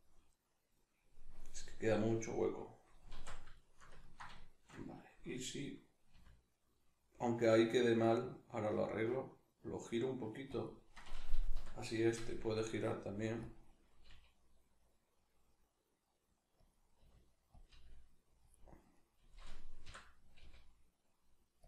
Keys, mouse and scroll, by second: 3.1 alt+q, 4.0 ctrl+middle click, 6.1 r, 10.6 click, 11.0 right click, 11.5 l, 13.5 click, 14.0 g, 16.7 click, 17.0 r, 17.6 click, 17.6 g, 18.5 click, 18.9 right click, 19.9 l.